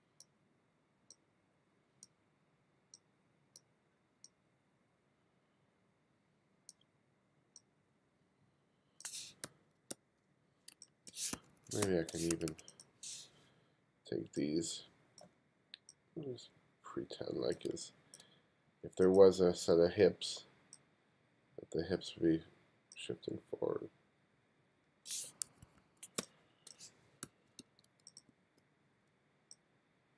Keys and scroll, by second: 9.5 f, 9.8 g, 10.6 space, 11.8 space, 12.2 2, 17.6 space, 25.4 1, 26.1 space, 27.2 f, 27.5 g, 28.2 b.